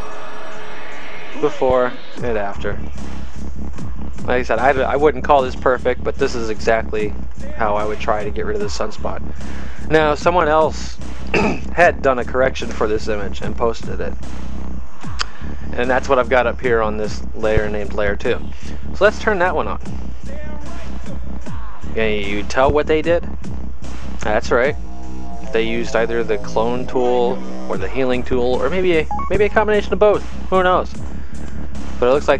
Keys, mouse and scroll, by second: 18.1 click, 21.2 click.